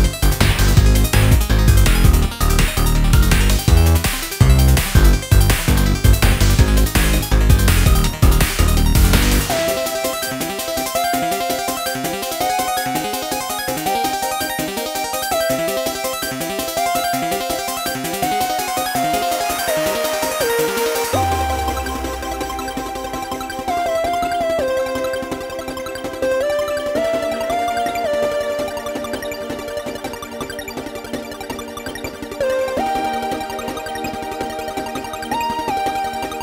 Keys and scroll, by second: 8.3 super+ㅇ, 15.5 super+ㅇ, 17.4 Right.